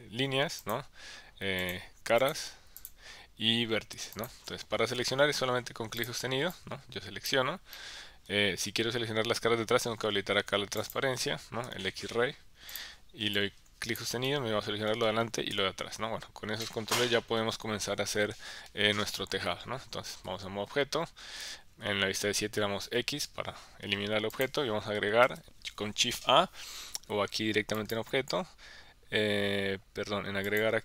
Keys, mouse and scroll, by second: 0.6 click, 1.6 click, 2.8 click, 4.1 click, 5.0 KP_1, 6.5 click, 7.7 middle click, 10.9 click, 11.6 KP_1, 12.7 click, 13.3 click, 14.3 middle click, 15.5 KP_1, 16.6 middle click, 19.1 KP_1, 20.1 Tab, 21.4 KP_7, 22.8 x, 25.2 shift+a, 27.7-29.6 drag, 30.4-30.8 drag.